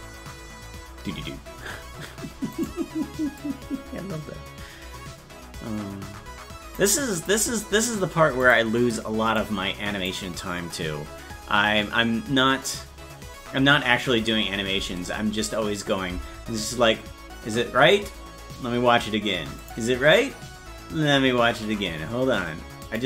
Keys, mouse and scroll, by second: 2.7 right click, 3.4-6.8 drag, 7.2 click, 8.5 click, 9.4 click, 19.6 click, 19.6 space, 22.8 click.